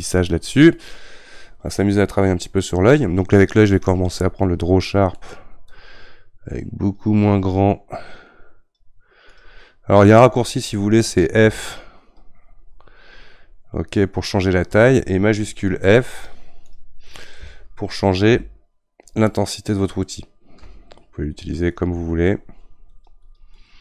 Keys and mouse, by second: 0.7-3.8 middle drag, 3.8-5.7 drag, 5.7-8.4 right drag, 11.4 f, 18.3 shift+f, 22.4-23.8 drag.